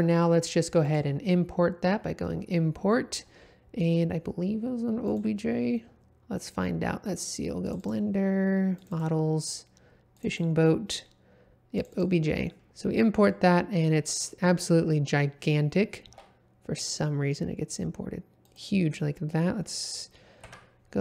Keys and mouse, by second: 0.8-5.3 drag, 16.0 s, 18.4 click, 20.4 KP_Decimal.